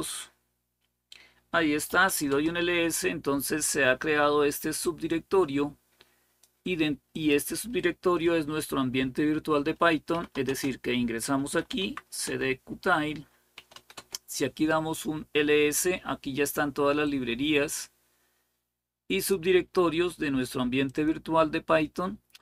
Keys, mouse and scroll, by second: 1.4-2.4 typing, 4.7-7.8 drag, 6.5 typing, 9.6-11.9 typing, 12.0 Return, 13.1-13.8 typing, 16.8-19.2 drag, 20.7 click.